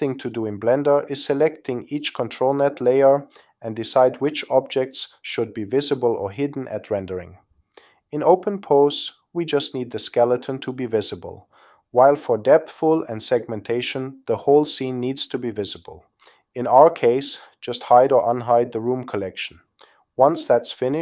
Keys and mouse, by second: 5.5 click, 6.9 click, 7.9 click, 9.2 click, 11.3 click, 12.4 click, 13.6 click, 14.8 click, 15.3 click, 16.6 click, 17.4 click, 18.4 click, 19.0 click, 20.1 click, 20.6 click.